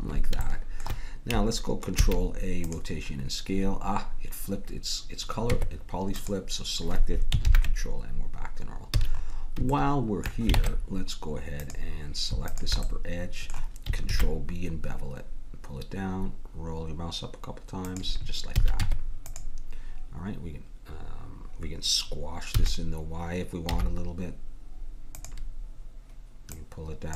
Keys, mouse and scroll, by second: 2.0 ctrl+a, 5.5 Tab, 7.5 ctrl+n, 9.0 a, 10.6 ctrl+Tab, 12.5 click, 14.0 click, 14.1 ctrl+b, 14.3-17.3 drag, 18.6 a, 18.8 Tab, 22.5 s, 26.5-27.1 drag.